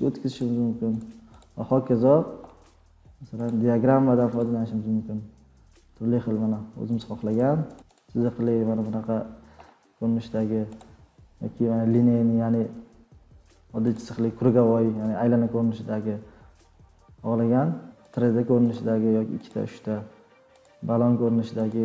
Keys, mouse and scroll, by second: 0.4 click, 1.0 click, 1.4 click, 3.5 click, 4.4 click, 7.0 click, 7.3 click, 7.7 click, 8.2 click, 8.5 click, 10.8 click, 13.9 click, 18.2 click, 18.6 click, 18.7 click, 19.5 click, 20.6 click, 21.7 click.